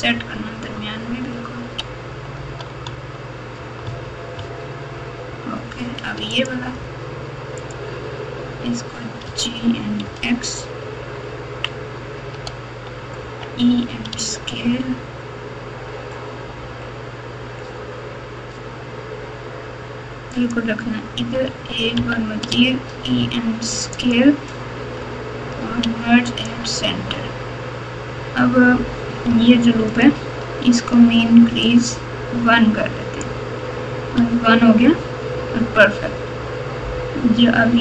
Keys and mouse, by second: 3.8 Tab, 4.4 Tab, 6.3 alt+click, 7.6 alt+click, 9.2 g, 13.2 e, 21.9 e, 25.8 m, 29.9 alt+click, 31.6-33.2 drag, 34.1 Tab, 35.2 Tab.